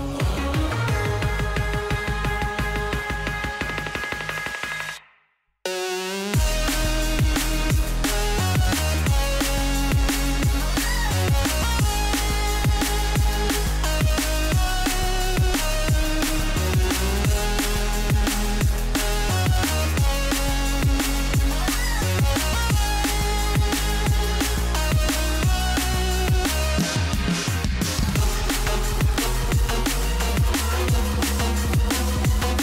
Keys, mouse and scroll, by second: 1.4-2.8 drag, 2.8-4.2 middle drag, 4.2-8.5 drag, 10.6-13.0 drag, 13.0-13.6 scroll up 2, 13.6-14.2 scroll up 1, 14.2 click, 15.8 F7, 16.0-17.8 middle drag, 17.8 scroll up 4, 18.5-19.8 middle drag, 19.8-20.1 scroll down 3, 20.1-22.4 middle drag, 22.4-22.9 drag, 23.6-26.6 middle drag, 27.3-28.6 middle drag, 28.6-31.6 drag, 32.4-32.6 middle drag.